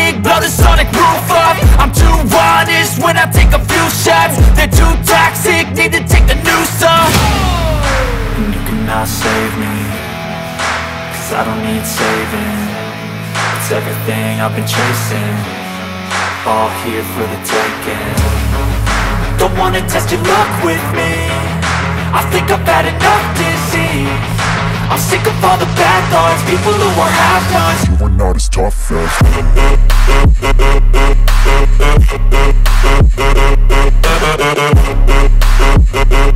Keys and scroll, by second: 7.4 alt+BackSpace, 8.6 ctrl+d, 14.9 v, 33.7 ctrl+t.